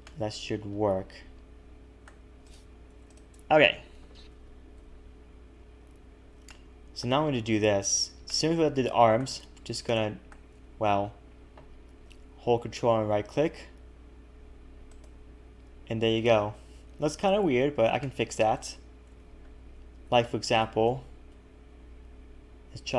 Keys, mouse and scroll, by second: 0.1 middle click, 2.5 click, 3.1 shift+click, 4.3 ctrl+KP_Add, 4.8 KP_1, 5.9 scroll down 1, 6.5 shift+middle click, 7.3-7.8 scroll down 1, 7.8-8.3 scroll down 4, 8.3 shift+middle click, 9.4 scroll down 1, 9.9 shift+middle click, 14.9 ctrl+right click, 18.0 shift+middle click, 19.0 a, 19.2 a, 19.4-20.0 scroll up 1, 20.0 scroll up 4, 20.5 alt+shift+click, 21.3 g.